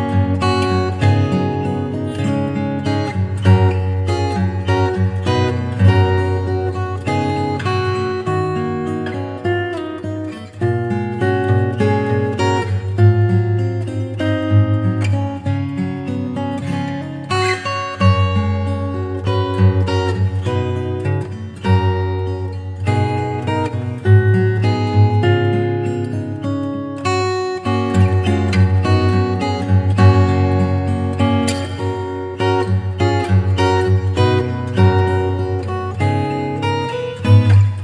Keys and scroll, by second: 2.0 d, 2.3 x, 4.2 [, 6.1 ], 7.3 [, 12.8 ], 14.7 [, 16.2 [, 18.9 ], 21.5 2, 21.9 ], 27.9 v, 30.3 super+Tab, 31.7 super+Tab, 33.2 super+Tab.